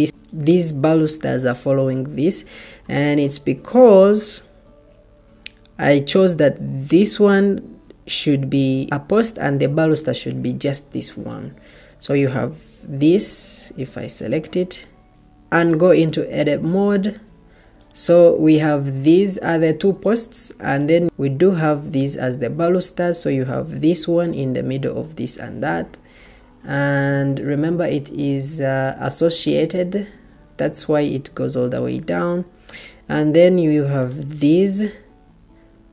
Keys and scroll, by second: 3.8 Escape, 13.0 Escape, 13.2 Escape, 35.7 Escape.